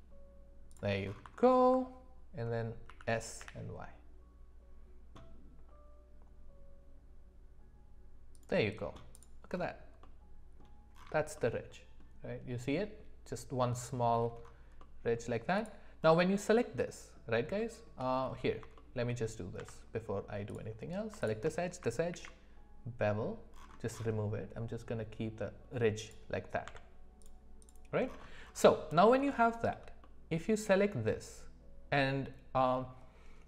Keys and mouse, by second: 1.4 alt+middle click, 3.1 s, 10.0-10.6 middle drag, 11.3-12.0 middle drag, 14.8 middle drag, 16.0-16.3 middle drag, 16.8 shift+middle click, 17.6 shift+middle click, 18.7 shift+middle click, 19.6 Tab, 21.2 shift+click, 22.1 ctrl+b, 26.6 Tab, 27.6 click, 28.9 middle click, 29.4 shift+middle click, 30.0-30.7 middle drag.